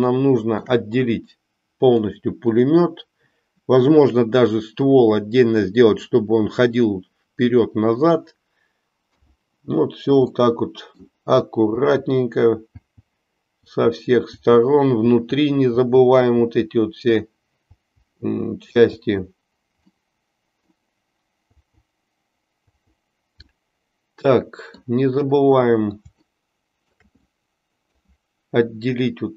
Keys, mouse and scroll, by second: 0.1 shift+middle click, 2.0 click, 9.1-18.8 l, 10.4 middle click, 20.0 middle click, 23.6-24.8 middle drag, 26.5 shift+middle click, 27.4 middle click.